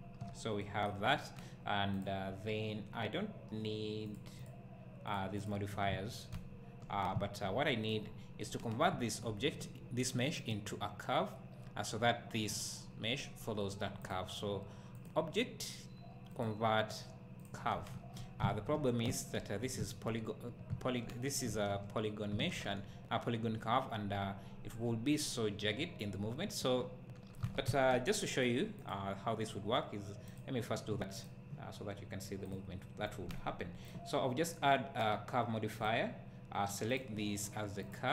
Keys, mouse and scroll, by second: 1.2 scroll up 1, 4.1-6.3 drag, 8.4 scroll down 1, 8.9 `, 12.6 click, 17.4-28.9 drag, 18.0 Tab, 21.5 Tab, 21.5-27.4 middle drag, 27.7 `, 28.4 middle click, 35.9-37.1 drag.